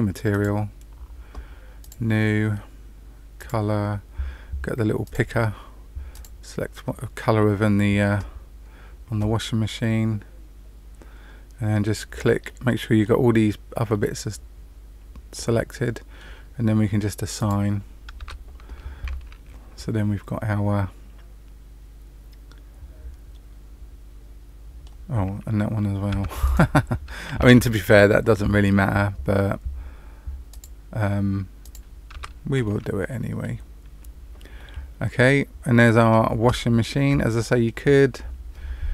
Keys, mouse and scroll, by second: 0.2 click, 1.7 click, 3.3 click, 8.4-10.6 scroll down 1, 12.4 middle click, 13.9 middle click, 17.3 click, 18.1 Tab, 19.0 middle click, 26.1 Tab, 26.4 click, 27.6 shift+click, 30.4 click, 31.6 click, 32.1 Tab, 32.6 middle click, 33.7 scroll down 1, 34.5 middle click, 36.7-37.1 scroll up 3, 37.3 shift+middle click.